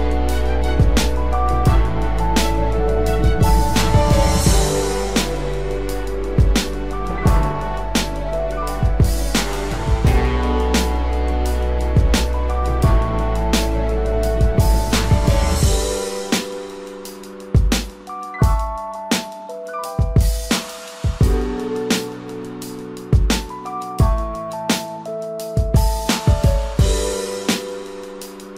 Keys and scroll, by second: 3.6 ctrl+=.